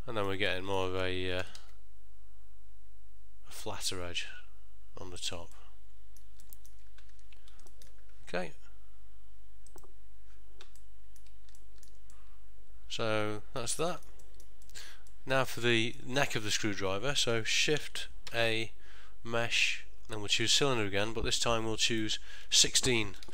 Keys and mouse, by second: 1.5 g, 5.7 middle click, 6.6 ctrl+middle click, 6.9 middle click, 7.2 Tab, 7.8 ctrl+middle click, 10.9 middle click, 11.7 ctrl+middle click, 12.3 middle click, 14.0 ctrl+middle click, 14.3 shift+middle click, 15.2 ctrl+middle click, 15.8 shift+middle click, 18.4 shift+a, 22.1 click.